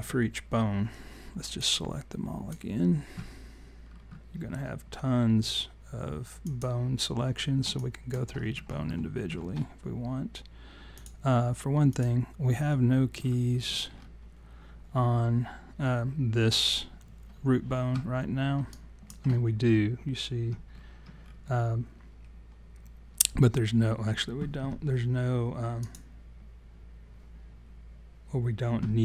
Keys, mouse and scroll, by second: 1.5 click, 3.8-5.1 scroll down 8, 6.4 click, 7.8 alt+click, 8.3 scroll up 4, 8.9 alt+middle click, 10.9 click, 11.9 click, 13.1-14.1 scroll down 13, 14.6 scroll down 2, 17.9 scroll up 1, 18.7 alt+click, 20.7-21.5 scroll up 10, 25.8 click.